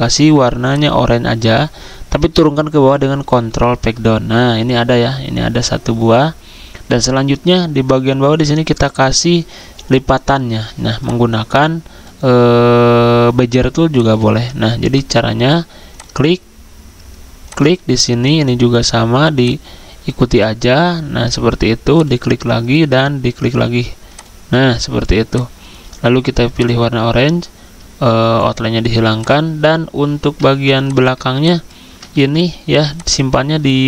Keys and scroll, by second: 3.3 ctrl+Page_Down, 32.2 ctrl+z, 33.7 ctrl+z.